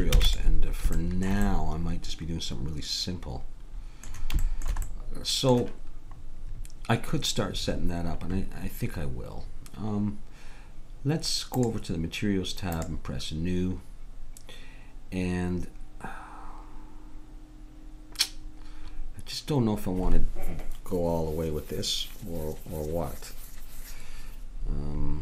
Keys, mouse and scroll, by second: 0.1 ctrl+s, 1.0-3.3 middle drag, 4.4-9.2 middle drag, 11.6-14.5 drag.